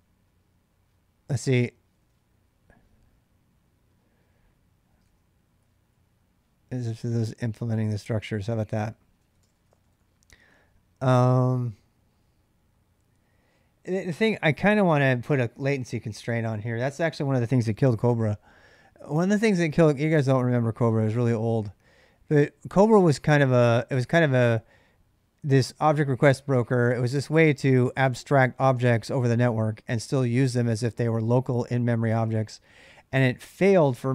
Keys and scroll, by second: 1.6-2.9 typing, 4.6-5.9 typing, 8.5-9.8 typing.